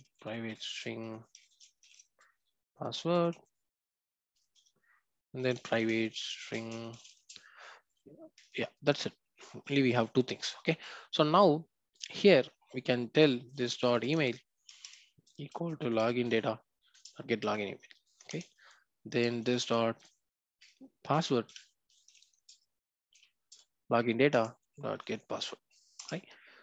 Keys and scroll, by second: 14.7 Return.